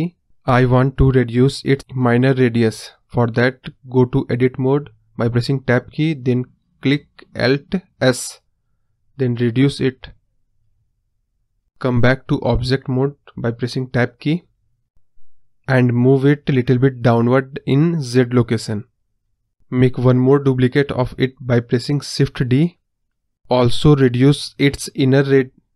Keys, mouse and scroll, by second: 3.0 middle click, 3.2 scroll down 4, 3.3-4.4 middle drag, 4.4 Tab, 6.3 alt+s, 11.1 KP_0, 12.9 Tab, 14.0-15.6 drag, 17.5-19.0 drag, 19.6 shift+s, 20.8 shift+d, 22.2-25.1 drag.